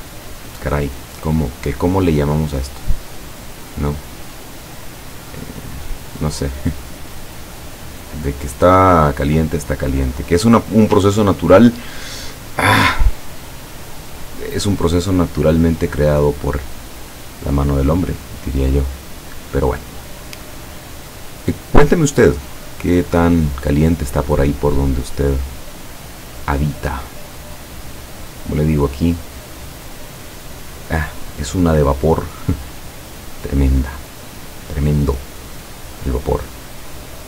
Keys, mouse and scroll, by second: 3.0 click, 4.3-6.1 drag, 6.7 click, 7.2 click, 8.6 click, 9.6 click, 11.0-11.7 ctrl+scroll down 4, 12.4-12.8 ctrl+scroll down 2, 14.1 click, 19.8 click, 20.4 click, 22.3-24.0 drag, 24.8-25.9 drag, 26.0 click, 26.7-28.6 drag, 30.0 click.